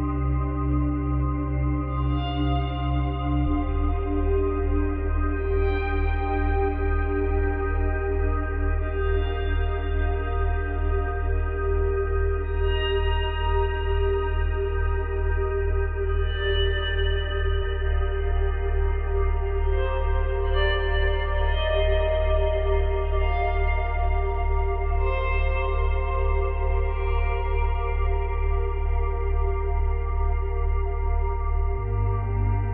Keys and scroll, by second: 10.6 Delete, 15.3 ctrl+z, 21.4 Delete.